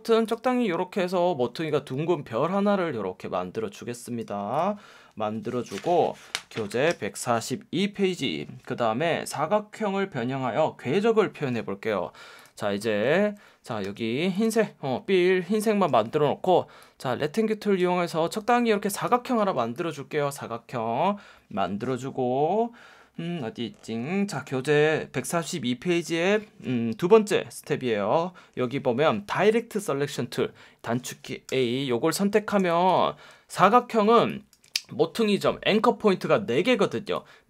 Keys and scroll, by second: 13.8 F1, 15.9 F1, 19.6 space, 31.5 a, 32.5 space, 33.0 space, 34.1 space.